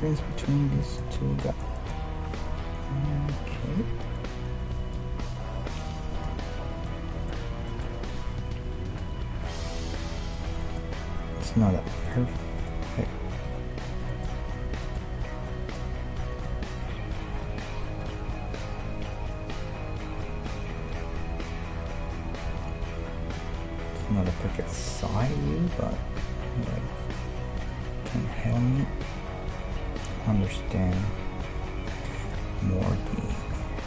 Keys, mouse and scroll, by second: 0.9-3.6 middle drag, 3.6-6.6 drag, 6.6-17.2 middle drag, 13.5-15.2 drag, 16.5-19.7 drag, 20.9-22.7 drag, 23.3-25.1 drag, 26.2-28.1 drag, 29.0-31.0 drag, 31.5-33.3 drag, 32.2-33.2 middle drag, 33.5 Tab.